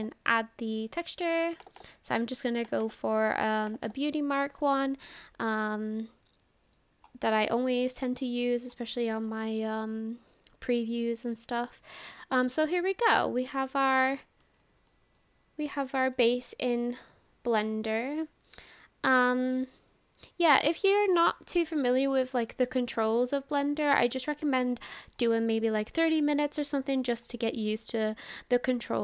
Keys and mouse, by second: 6.7 click, 10.6 click, 13.7 click, 14.6 shift+middle click, 15.2 middle click, 15.9 shift+middle click, 16.2-20.7 middle drag, 20.9 shift+middle click, 22.8-24.5 middle drag, 25.5 middle click, 27.5-29.0 middle drag.